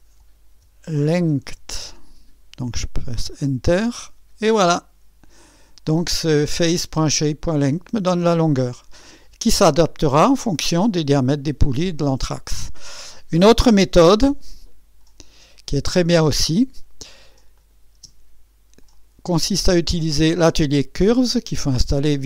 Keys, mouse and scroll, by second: 0.0-3.1 typing, 5.4 click, 15.2 click, 17.5 click, 18.0 space, 18.9 click, 21.9 click.